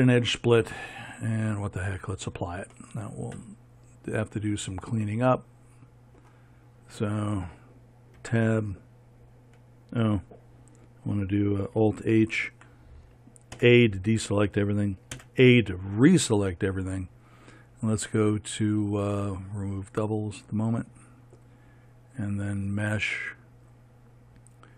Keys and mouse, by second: 2.1-8.7 drag, 8.7 Tab, 12.7 alt+h, 14.0 a, 20.6-23.1 drag.